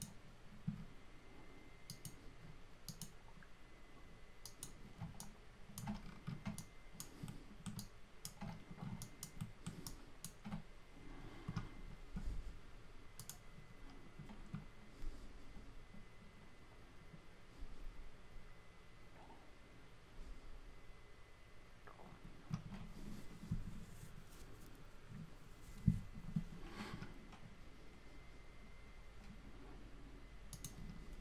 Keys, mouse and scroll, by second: 7.3-9.4 typing.